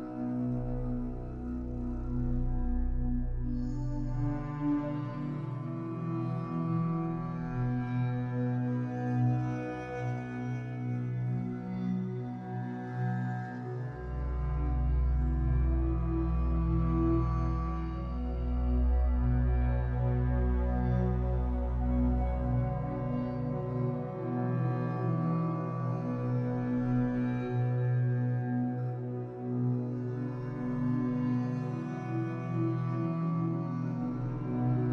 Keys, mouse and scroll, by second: 7.3-22.0 drag, 22.0-25.4 shift+middle drag, 23.4 scroll up 2, 25.4-26.9 drag, 26.7 scroll up 2, 26.9-31.9 shift+middle drag, 31.9 click, 32.5-34.9 shift+middle drag.